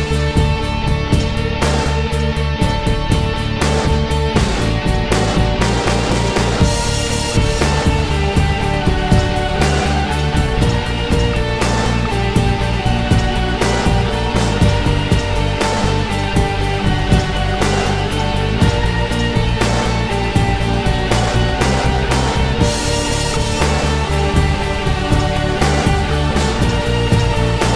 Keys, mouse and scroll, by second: 0.6 click.